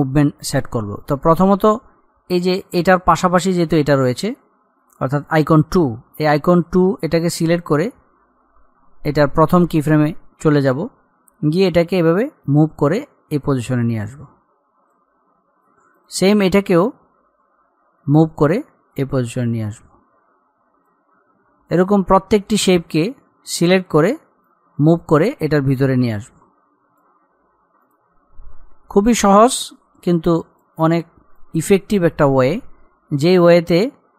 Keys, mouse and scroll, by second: 7.5-18.4 drag, 18.7-21.8 drag, 21.8-22.4 scroll up 1, 22.7-34.1 drag.